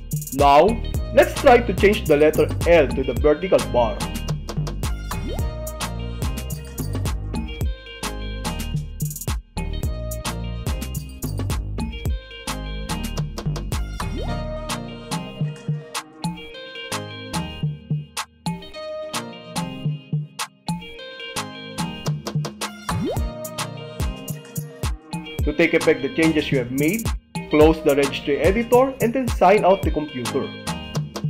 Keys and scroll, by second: 4.4 Tab, 6.4 s, 8.4 s, 10.4 Return, 12.6 End, 20.3 BackSpace, 23.9 Return, 27.2 shift+Tab, 30.7 Left, 30.9 BackSpace.